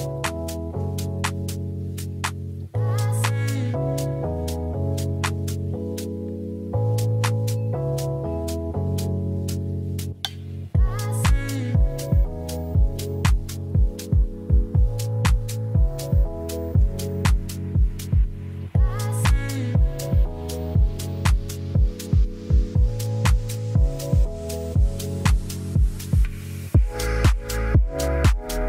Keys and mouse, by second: 0.3 click, 0.7 middle click, 1.4 click, 1.9-3.9 drag, 5.8-8.4 drag, 10.2-11.9 drag, 12.3 middle drag, 13.0 middle click, 13.7 shift+middle click, 14.7 ctrl+s, 15.4 click, 18.4 click, 20.6-20.9 middle drag, 21.2 ctrl+s, 21.9 middle click, 22.3 shift+middle click, 22.6 middle click, 23.9-24.2 middle drag, 24.4 shift+middle click, 24.6 Tab, 24.8 middle click, 27.3 click, 28.2 click, 28.4-28.6 drag.